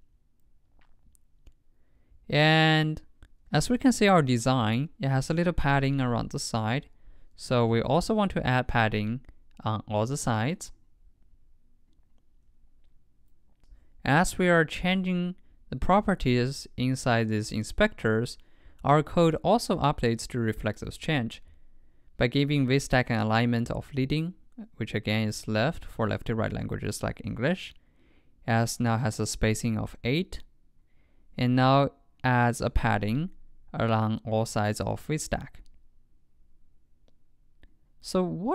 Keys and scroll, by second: 3.6 super+Tab.